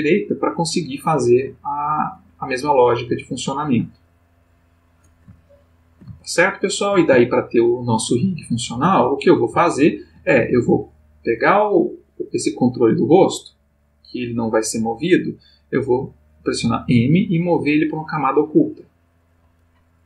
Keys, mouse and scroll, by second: 2.7 click, 4.3 click, 5.4-7.1 ctrl+middle drag, 7.2-8.9 ctrl+shift+middle drag, 9.6-10.3 shift+middle drag, 10.9 click, 16.9 m, 17.9 click.